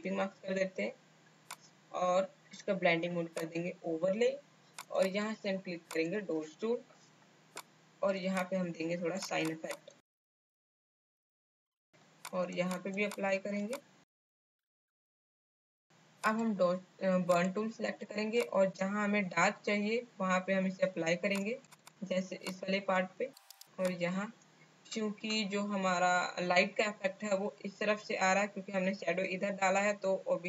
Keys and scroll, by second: 10.6 space, 11.0 space, 11.7 space, 13.5 space, 15.0 space, 15.4 space, 15.7 space, 18.7 space.